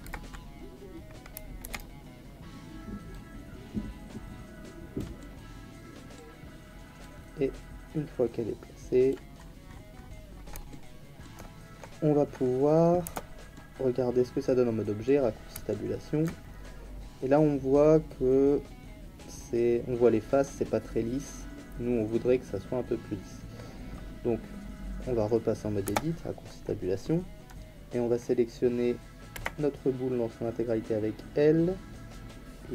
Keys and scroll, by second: 0.0 ., 1.6 ctrl+z, 13.0 Tab, 25.8 Tab, 29.3 l.